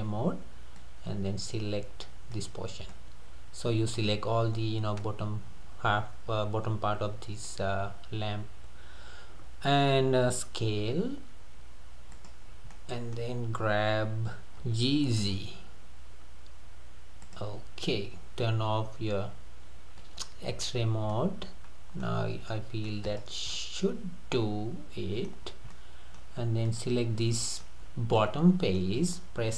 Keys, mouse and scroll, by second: 2.9-5.9 middle drag, 10.7 s, 12.5 scroll down 3, 12.7-14.6 middle drag, 14.6 g, 20.0 click, 20.6-21.2 scroll up 5, 21.3-22.2 middle drag, 22.2-22.5 scroll down 3, 22.5-22.9 middle drag, 22.9 scroll up 1, 23.1 click, 23.6-25.5 middle drag, 25.5 scroll up 1, 25.7-26.2 middle drag, 26.2-26.5 scroll up 1, 26.7 click, 27.2-27.9 middle drag, 27.9-28.2 scroll down 3, 28.2-29.5 middle drag.